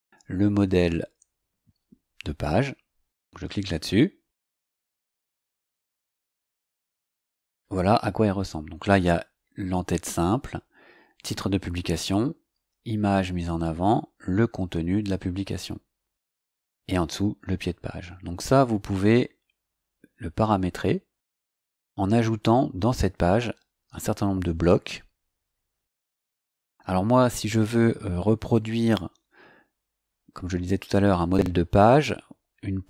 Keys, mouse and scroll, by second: 0.2 scroll up 2, 4.9 click, 11.4 scroll down 2, 13.3-17.9 scroll down 2, 17.9-18.3 scroll up 2, 19.0 scroll up 2, 19.7 scroll up 2, 31.3 click, 32.1 scroll down 2.